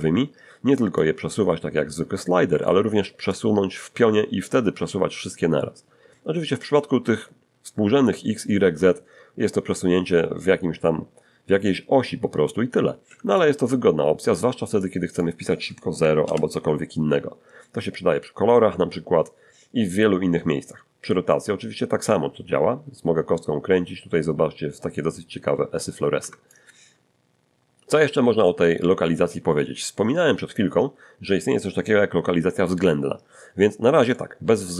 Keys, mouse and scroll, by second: 1.0-2.8 drag, 2.5 Escape, 3.3-13.5 drag, 13.1 Escape, 13.5-14.8 middle drag, 14.8 click, 16.0 0, 16.2 Return, 21.4-26.7 drag, 26.2 Escape, 34.1 middle click.